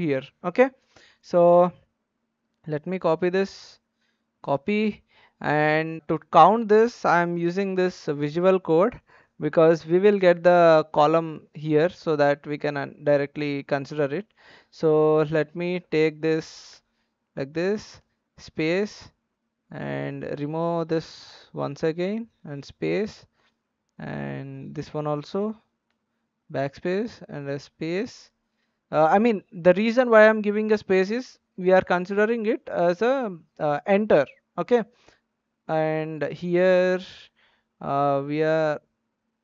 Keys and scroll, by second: 3.7 ctrl+c, 7.4 ctrl+v, 21.4 Left, 21.7 BackSpace, 22.3 space, 38.4 Left.